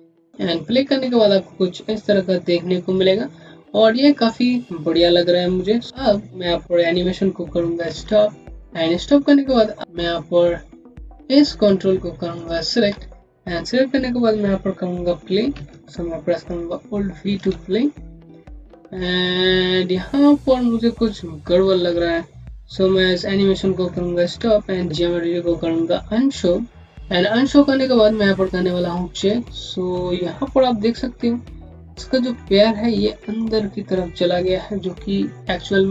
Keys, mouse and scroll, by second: 7.9 v, 8.8 scroll down 1, 9.8 alt+middle click, 12.2 click, 12.8 scroll up 1, 15.4-15.7 scroll up 1, 17.3 v, 24.1 v, 27.5 scroll up 1, 29.1 click.